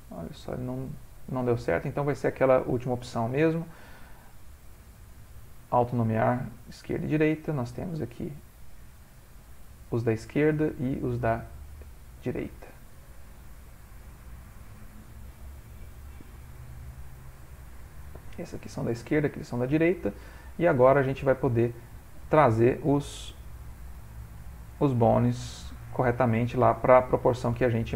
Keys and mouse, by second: 0.3 middle click, 1.6 click, 6.3 middle click, 7.4 shift+middle click, 7.8 middle click, 8.9 click, 10.6 middle click, 11.3 click, 13.5 click, 16.8 middle click, 17.9 ctrl+middle click, 18.2 middle click, 18.8 middle click, 18.9 ctrl+middle click, 19.7 ctrl+middle click, 19.9 ctrl+middle click, 20.2 middle click, 20.9 ctrl+middle click, 21.3 shift+middle click, 21.4 shift+middle click, 23.4 click, 24.1 ctrl+middle click, 24.9 click, 25.9 g, 27.2 ctrl+middle click, 27.7 shift+middle click.